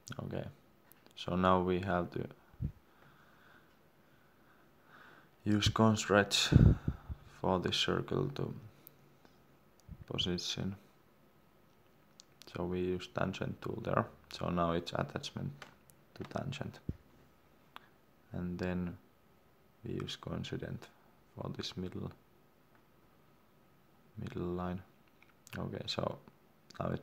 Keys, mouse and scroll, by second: 1.0 Return, 3.7 Escape, 6.0 scroll down 1, 8.2 click, 8.6 Escape, 9.8 click, 13.4 Escape, 14.4 click, 17.4 Escape, 22.6 click.